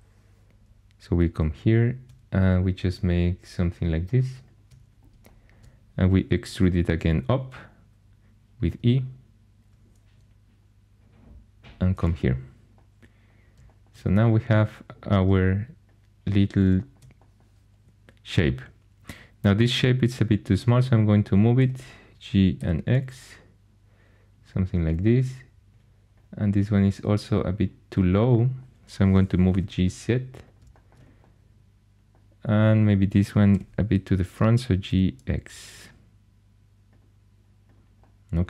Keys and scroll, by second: 6.5 e, 21.6 g, 22.6 x, 29.1-30.0 typing, 33.5 g, 34.9 x.